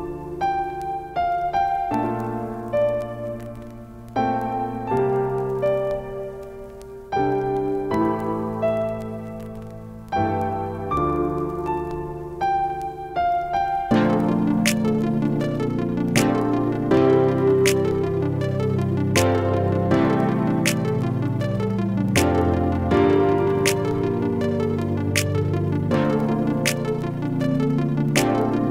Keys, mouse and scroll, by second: 1.4-2.4 typing, 3.5 shift+Return, 4.0 typing, 6.3 click, 11.2 click, 18.1 click, 19.8 click, 21.8 Up, 25.4 click, 25.7 Up.